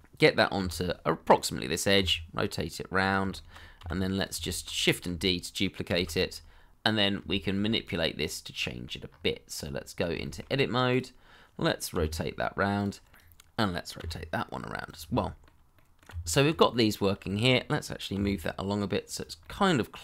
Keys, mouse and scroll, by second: 0.5 g, 1.9 r, 3.3 shift+middle click, 3.8 g, 4.4 shift+middle click, 5.9 shift+d, 6.7 middle click, 7.3 shift+middle click, 8.2 double click, 8.5 middle click, 9.0-9.5 scroll up 1, 9.5 Tab, 10.2 shift+middle click, 11.9 r, 13.9 r, 15.1 middle click, 16.1 Tab, 16.7 middle click, 17.2 shift+middle click, 18.1 g, 19.5 middle click.